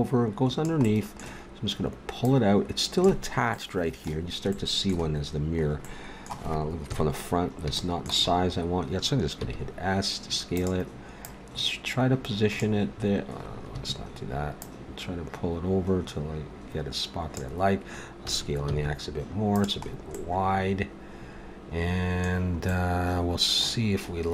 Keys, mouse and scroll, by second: 0.9-3.0 middle drag, 3.5-4.5 middle drag, 6.8 KP_1, 9.4 s, 11.2-13.1 drag, 14.6-16.4 drag, 18.2 s, 20.1-21.5 middle drag.